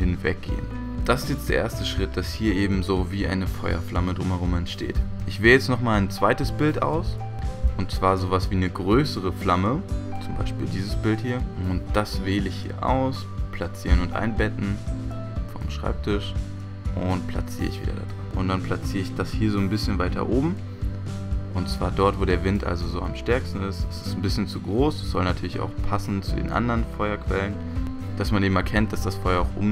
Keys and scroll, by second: 0.0 x, 5.0 v, 27.8 typing.